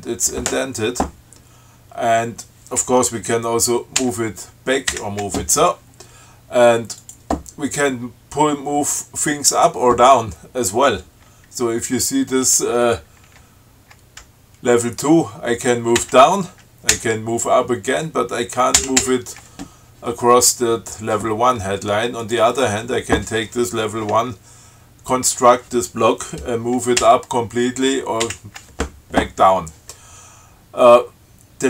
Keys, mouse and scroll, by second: 4.2 alt+Left, 5.1 alt+Right, 7.2 click, 9.7 click, 16.2 alt+Down, 17.1 alt+Up, 19.0 alt+Up, 22.4 click, 27.2 alt+Up, 28.4 alt+Down.